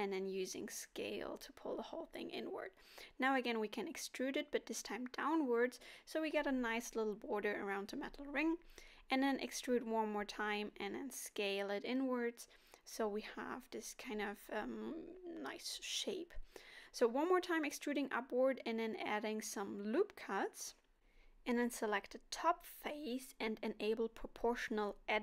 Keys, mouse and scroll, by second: 1.5 e, 4.5 e, 5.3 right click, 6.8 s, 11.3 middle click, 13.2 e, 15.3 ctrl+r, 18.3 click, 18.8 click, 20.6 o, 23.6 s.